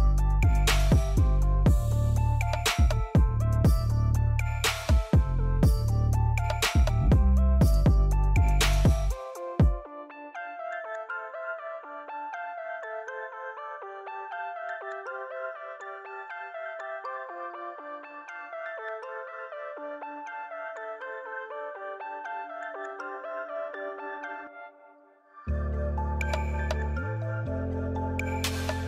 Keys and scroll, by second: 3.8 z, 6.5 p, 9.9 l, 12.9 Escape, 14.2 x, 16.6 c, 17.8-19.9 typing, 21.8 e.